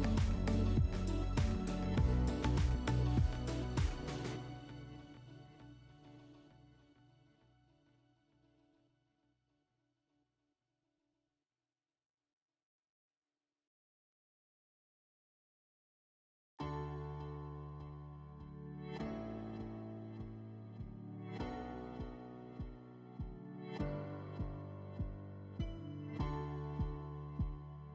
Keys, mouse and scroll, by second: 3.1 right click, 4.6 right click, 6.1 click, 7.1 click, 7.3 click, 8.4-8.8 typing, 9.2 Return, 11.0 click, 11.5 right click, 12.6 click, 13.5 click, 13.7 click, 14.1-15.4 typing, 16.5 BackSpace, 16.7 BackSpace, 17.7 Return, 19.2 click, 20.1 w, 21.2 ctrl+click, 23.6 click, 24.8 click, 25.8 alt+w.